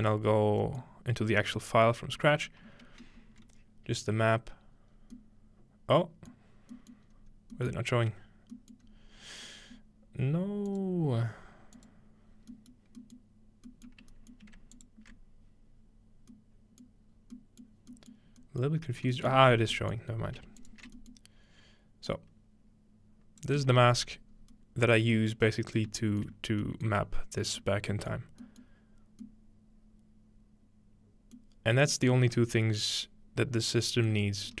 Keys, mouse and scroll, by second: 0.5-0.9 scroll up 3, 1.3-1.6 scroll up 1, 1.6 click, 3.2 z, 4.9-6.3 scroll down 2, 6.3 middle click, 6.3-6.7 scroll down 1, 6.9-7.5 middle drag, 7.1-8.5 scroll up 2, 7.7-8.5 middle drag, 8.5-10.1 scroll up 2, 8.8-10.1 middle drag, 10.7 click, 11.8 click, 12.3 scroll down 2, 12.7 middle click, 13.2 middle click, 13.9 middle click, 13.9 scroll down 1, 14.1-14.5 scroll up 2, 14.8-15.2 alt+shift+drag, 16.3-17.1 scroll up 2, 16.9-18.4 middle drag, 17.1-18.4 scroll down 1, 18.4 scroll up 2, 19.0 scroll down 2, 20.1 scroll up 2, 20.6-25.0 alt+shift+drag, 24.3-26.1 scroll up 1, 25.1 shift+middle click, 25.4 middle click, 25.9 middle click, 26.3 middle click, 26.4-28.1 scroll down 1, 27.0 middle click, 28.1 middle drag, 28.6-29.2 middle drag, 31.6-34.6 middle drag, 31.7-33.3 scroll down 2, 34.5-34.6 scroll up 1.